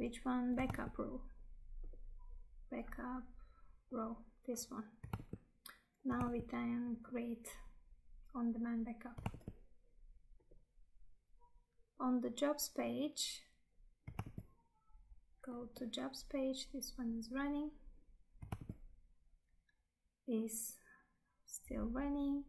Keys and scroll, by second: 5.2 Tab, 9.4 Tab, 15.3 Tab, 18.7 Tab.